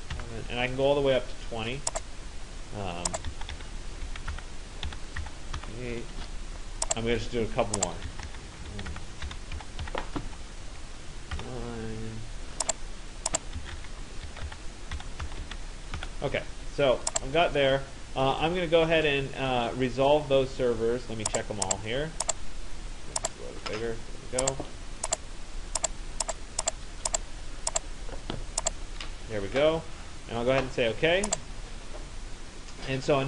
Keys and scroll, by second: 0.0-0.1 typing, 3.0-6.0 typing, 7.8-10.3 typing, 11.4 9, 13.3-16.0 typing.